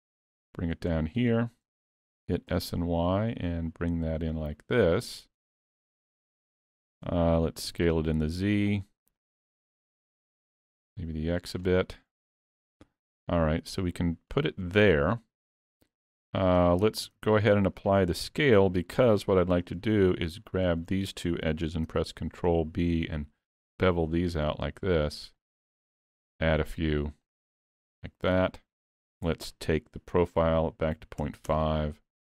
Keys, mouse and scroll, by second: 0.1 click, 1.1-1.4 scroll up 3, 1.4 shift+middle click, 6.0 middle click, 7.7 s, 9.8 middle click, 10.4 s, 12.2 middle click, 13.3 click, 14.6-15.0 scroll up 2, 14.9 middle click, 17.2 ctrl+a, 18.2 Tab, 19.1 2, 19.6 click, 20.5 shift+click, 21.9 ctrl+b, 26.6 click.